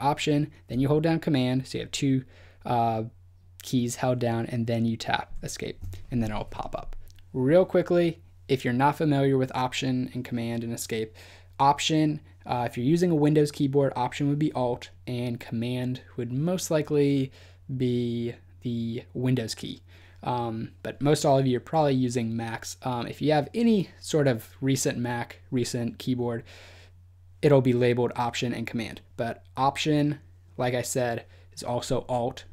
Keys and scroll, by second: 5.2 alt+super+Escape.